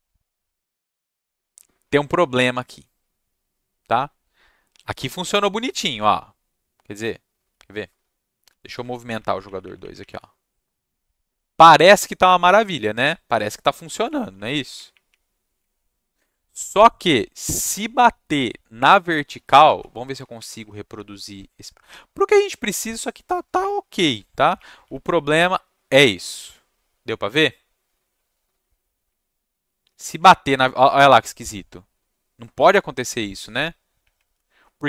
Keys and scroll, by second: 8.4 Down, 8.6 Down, 8.8 Down, 9.0 Up, 9.2 Up, 9.4 Up, 9.6 Up, 9.8 Up, 9.9 Up, 10.1 Down, 12.7 Down, 14.0 Up, 14.3 Up, 14.5 Up, 14.7 Up, 14.9 Up, 15.0 Up, 16.2 Down, 16.9 Down, 19.6 Down, 19.9 Up, 20.3 Up, 20.9 Down, 23.6 Up, 24.1 Down, 24.5 Up, 24.9 Down, 25.2 Up, 27.9 Down, 29.0 Up, 29.6 Up, 30.1 Up, 31.9 Down, 33.0 Down, 34.0 Up, 34.3 Down.